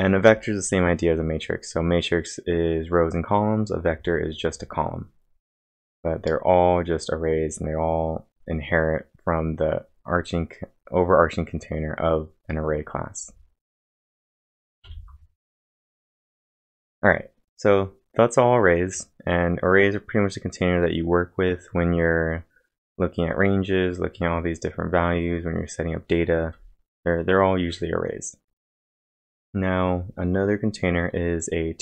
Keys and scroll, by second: 9.6 Return, 9.6 scroll down 1, 12.6-13.2 scroll down 3, 14.3-14.7 scroll down 6, 14.8 ctrl+l.